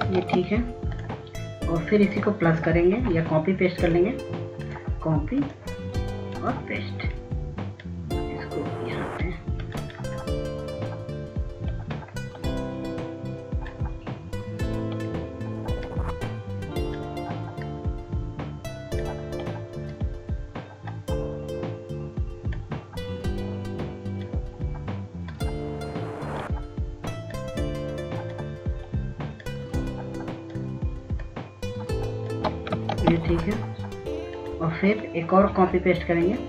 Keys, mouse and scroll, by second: 1.1 ctrl+space, 1.8 click, 10.6-24.6 drag, 34.0 ctrl+space, 34.4 click.